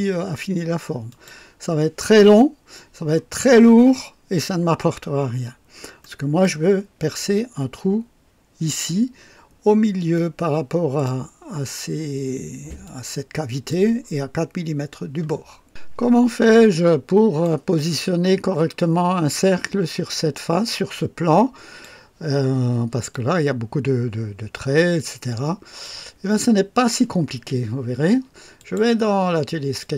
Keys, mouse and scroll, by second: 1.0 click, 5.4 scroll up 1, 6.0 right click, 10.1-11.2 drag, 12.8-13.8 drag, 16.6-17.6 drag, 20.6-22.0 drag, 23.1-26.0 drag, 28.5 click, 29.7 click.